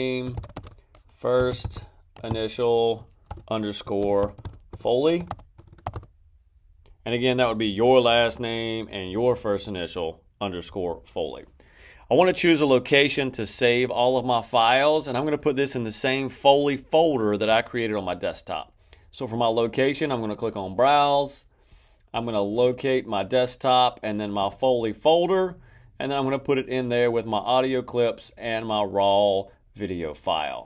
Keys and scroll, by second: 0.0-6.4 typing.